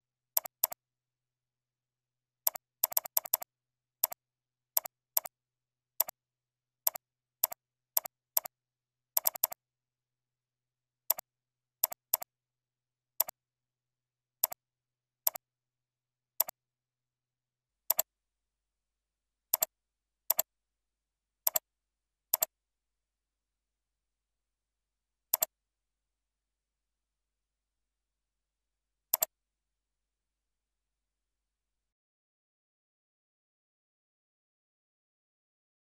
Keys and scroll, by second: 12.6 ctrl+z.